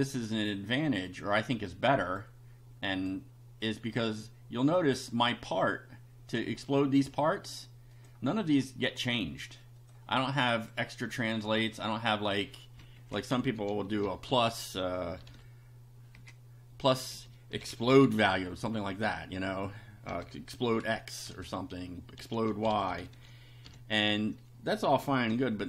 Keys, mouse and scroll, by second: 1.5 click, 3.0 click, 4.0-5.4 drag, 8.0 click, 9.8 click, 10.6 click, 11.9 click, 13.3 Left, 13.4-15.3 typing, 16.7-18.8 typing, 20.1-25.6 typing.